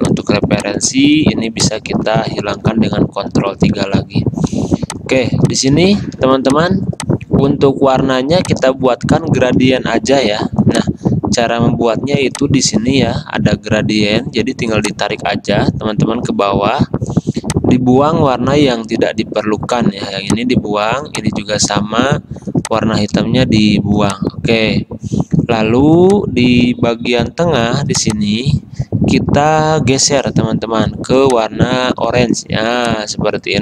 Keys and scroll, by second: 3.5 ctrl+3, 4.7 space.